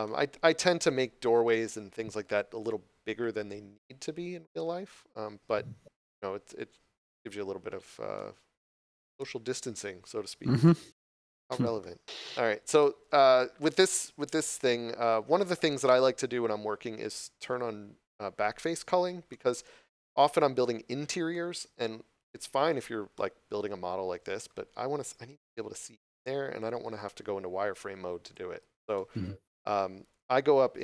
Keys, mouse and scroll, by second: 8.1 middle click, 11.3 scroll down 1, 11.7 middle click, 12.2 shift+middle click, 19.2 middle click, 22.6 scroll down 1, 23.0 middle click, 24.7 scroll up 1, 25.4 middle click, 26.7 shift+z, 27.0 scroll down 1, 28.2 shift+z, 28.5 scroll up 1, 28.8 middle click, 29.2 scroll down 1.